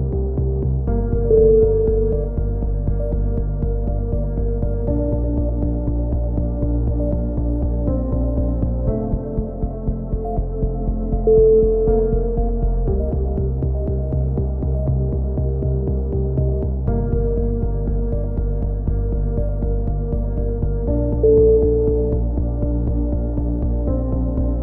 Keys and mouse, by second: 1.2 a, 1.4-2.2 middle drag, 1.4 c, 2.2 right click, 2.2 g, 3.4 middle click, 3.5 z, 3.7-4.5 middle drag, 3.7 a, 4.6-5.0 drag, 4.8 z, 5.4-5.8 drag, 5.4 z, 7.8 z, 9.2 KP_3, 11.9 s, 13.3 z, 13.5-15.0 drag, 16.0 KP_3, 16.2 z, 16.5-17.0 drag, 21.7 r, 24.5 click.